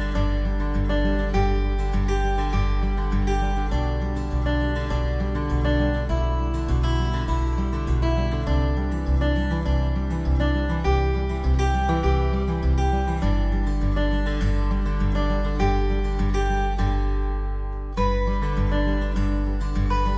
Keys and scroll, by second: 15.9 alt+space, 16.7 alt+space.